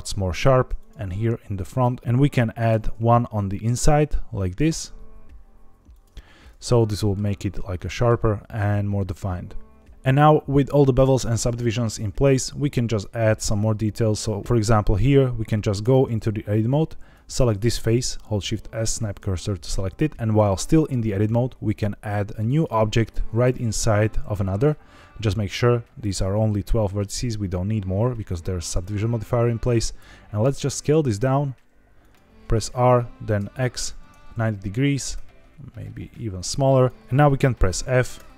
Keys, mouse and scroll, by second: 0.3 ctrl+r, 2.0 Escape, 2.0 ctrl+z, 2.6 ctrl+r, 5.8 click, 6.1 Tab, 6.7 middle click, 7.7 middle click, 12.8-13.4 right drag, 14.4 click, 15.8 Tab, 16.8 3, 17.0 click, 18.0 shift+s, 21.0 shift+a, 29.9 s, 31.9 click, 32.5-33.8 typing, 34.0 KP_Enter, 35.1 s, 36.7 click, 37.0 Escape, 37.0 y, 37.6 f, 38.1 e.